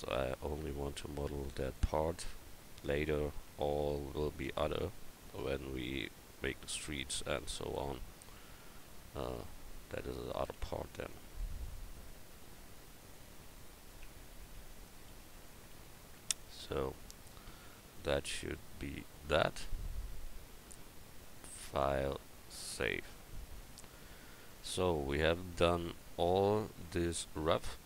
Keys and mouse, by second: 1.8-3.5 drag, 3.0 a, 3.5 c, 4.7-6.3 drag, 4.7 x, 6.3 Tab, 7.2 Tab, 10.6 ctrl+r, 13.6 Tab, 14.0 Tab, 14.7 click, 15.6 x, 16.6 Tab, 18.2 a, 25.9 KP_1.